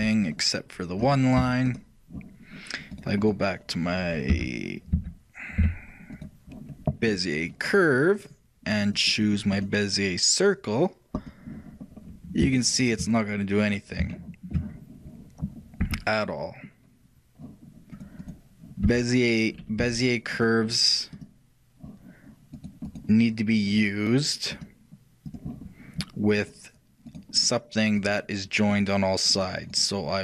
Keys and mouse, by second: 1.9-4.0 middle drag, 4.0-5.0 right drag, 4.4 z, 5.0 middle click, 5.0 z, 5.7 Tab, 8.8-11.5 drag, 11.9-15.9 middle drag, 15.9 e, 18.9-20.0 right drag, 18.9 e, 20.0 g, 21.2-23.1 drag, 23.0-25.5 right drag, 24.6-26.5 drag, 26.5-30.2 right drag.